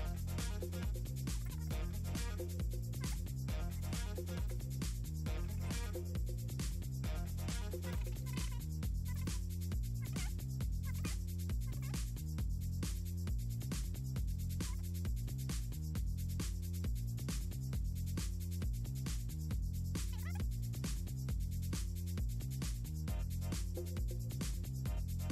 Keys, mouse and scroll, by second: 0.5 click, 0.9 click, 1.3 1, 1.6 click, 2.6 click, 2.7 1, 3.2 click, 3.8 click, 4.4 click, 4.9 Delete, 5.5 ctrl+z, 5.7 ctrl+z, 6.0 click, 6.3 ctrl+z, 7.2 click, 8.1 Delete, 9.5 click, 10.3-11.2 typing, 10.4 click, 11.1 click, 12.9 1, 13.3 click, 13.5 k, 13.9 click, 15.5 click, 16.4 click, 17.0 click, 18.2 Delete, 18.7 click, 19.3 click, 20.5 Delete, 20.8 click, 21.1 Delete, 21.3 scroll down 2, 21.5 click, 21.7 2, 24.5 F8, 24.6 F7, 24.8 F7, 25.0 F6.